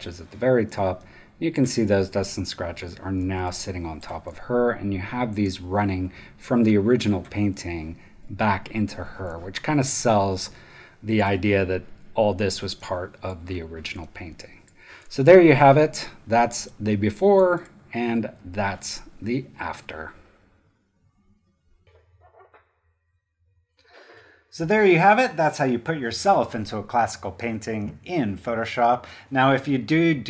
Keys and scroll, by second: 0.7 space, 1.8 super+space, 3.2 space, 4.0 super+space, 9.2 space, 12.6 super+space, 14.2 super+space.